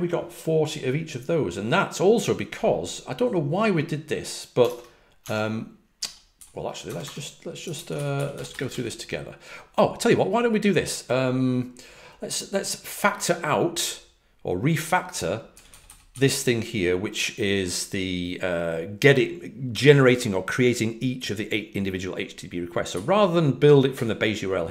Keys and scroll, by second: 4.6 super+Tab, 5.1 super+Tab, 6.8-9.1 typing, 15.5-16.1 typing, 24.5-24.7 typing.